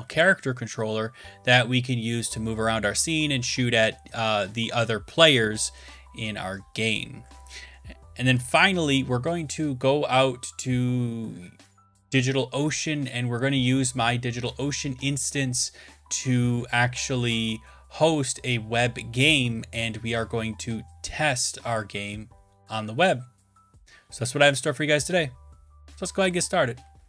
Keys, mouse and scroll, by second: 0.0 Down, 0.5 Left, 1.0 click, 1.3 click, 7.6-9.9 drag, 10.5 click, 11.1 click, 17.3 click, 17.3 click, 19.5 click.